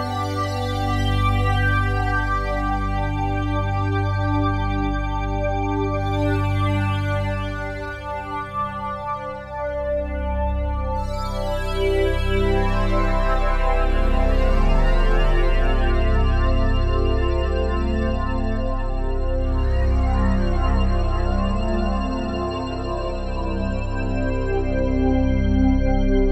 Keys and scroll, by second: 0.3 s, 12.4 f.